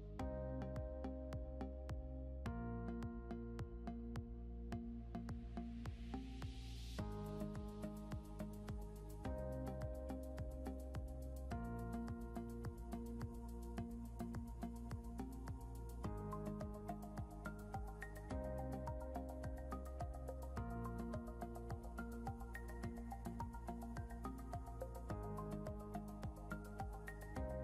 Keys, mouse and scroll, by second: 1.1 ctrl+g, 1.4-1.9 scroll down 2, 2.9 click, 5.8 scroll up 1, 6.8 click, 9.9 scroll up 1, 10.5 click, 12.2 click, 21.7 scroll down 1, 22.4 click, 24.0-25.0 typing, 26.4 click.